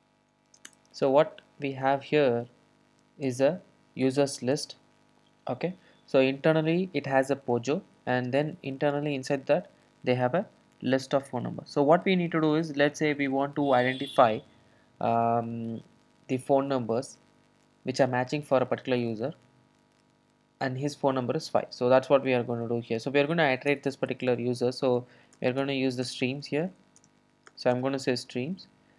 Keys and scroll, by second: 3.4 alt+super+l, 27.5 Return.